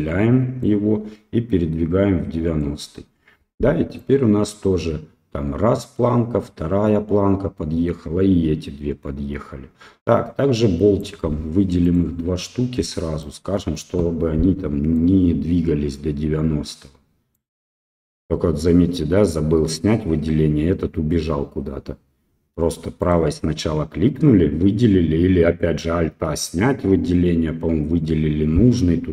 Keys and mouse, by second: 0.6-2.6 drag, 4.0-11.0 drag, 11.8 click, 13.2 shift+click, 14.9-17.3 drag, 23.0 click.